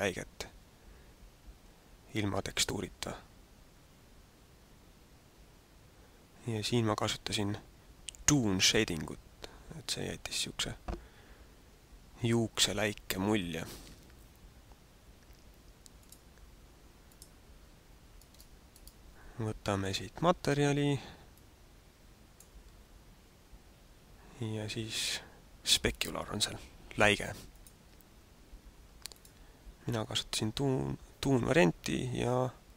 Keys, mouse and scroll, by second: 18.2 right click, 18.7 right click, 19.9 click, 21.3 click, 27.4 click.